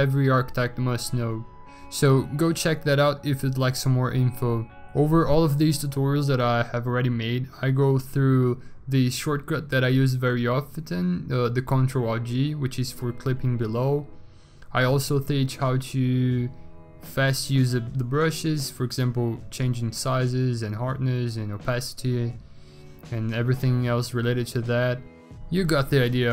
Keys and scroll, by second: 0.8 x, 1.2 x, 1.8 x, 4.0 x, 4.4 x, 4.9 x, 6.4 ctrl+z, 7.0 x, 7.4 ctrl+z, 10.2 s, 12.7 ctrl+z, 12.8 s, 13.3 ctrl+z, 13.4 s, 15.9 ctrl+z, 17.0 ctrl+z, 17.0 s, 21.4-22.0 v, 24.6 b, 25.2 ctrl+z.